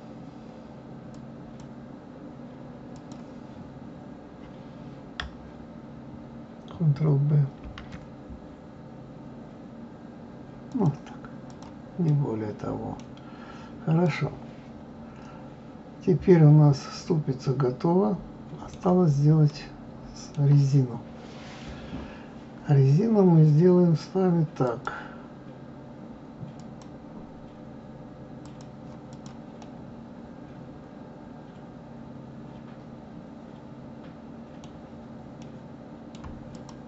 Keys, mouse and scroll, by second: 1.1-5.9 drag, 11.5 click, 12.1 middle click, 13.0-13.4 scroll down 2, 14.1-17.0 middle drag, 18.9-19.5 scroll down 2, 19.5-22.5 middle drag, 24.6-27.6 drag, 29.1 click, 29.6-32.6 middle drag, 35.4-36.5 middle drag, 36.5 click.